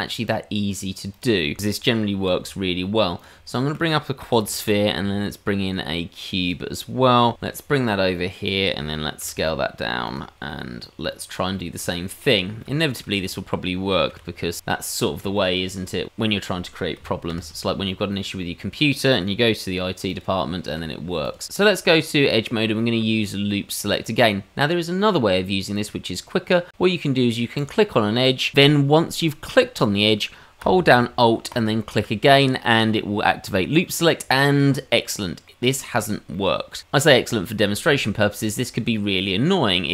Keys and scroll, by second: 2.6 g, 4.9 shift+a, 7.8 g, 9.8 s, 11.1 g, 13.6 g, 16.4 ctrl+KP_Add, 18.3 h, 21.6 Tab.